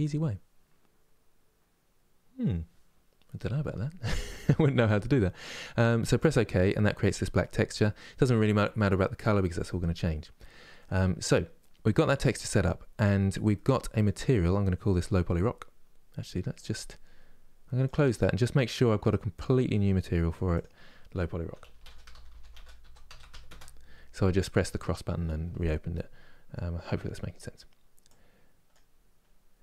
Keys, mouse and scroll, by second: 5.9-10.5 drag, 10.5-17.6 middle drag, 17.8-29.6 drag.